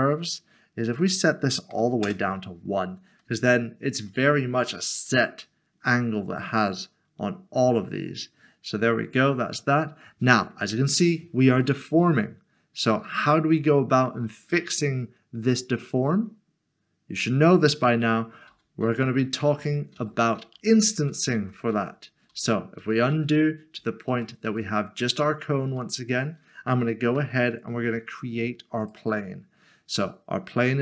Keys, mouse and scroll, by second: 2.0 Return, 3.2 middle click, 5.9 middle click, 11.2 middle click, 11.4 scroll up 1, 13.8 scroll down 1, 14.6 middle click, 17.7 middle click, 18.0 ctrl+z, 25.8 middle click, 27.1 a, 28.8 click.